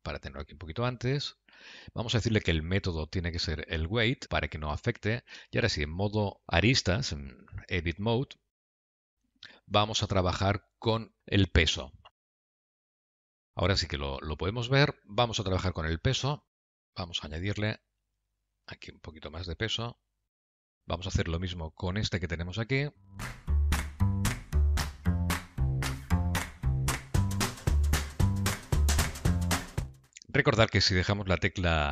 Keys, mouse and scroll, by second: 3.8 click, 5.6 Tab, 7.6 alt+click, 8.8 middle click, 12.2 click, 12.3 click, 13.4 click, 14.0 middle click, 16.8 click, 21.5 click, 22.2 alt+click, 23.0 middle click, 23.3 alt+click, 23.7 shift+click, 24.6 click, 26.3 middle click, 26.7 click, 26.9 q, 27.4 shift+click, 28.2 q, 28.5 shift+click, 28.7 q, 29.2 shift+click.